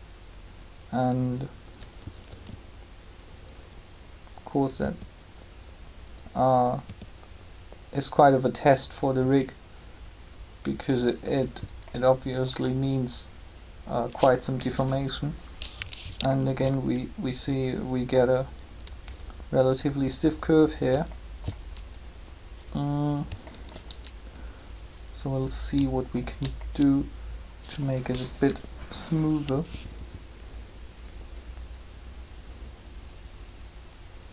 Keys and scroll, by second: 2.3 r, 4.8 r, 6.9 r, 9.2 r, 11.3 r, 14.7 3, 28.4 3.